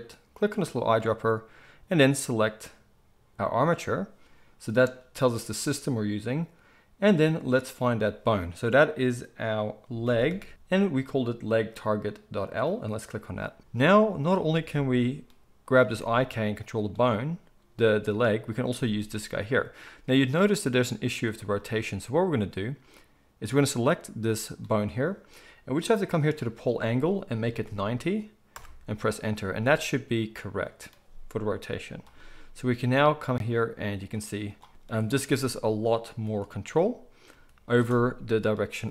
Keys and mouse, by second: 7.0-14.3 drag, 14.3-24.2 middle drag, 15.8 g, 18.7 g, 24.2 click, 24.3-26.2 middle drag, 26.2-32.0 drag, 32.0-34.5 middle drag, 32.8 g, 34.5-35.1 drag, 35.1-38.9 middle drag, 35.2 g, 36.2 r, 37.3 g.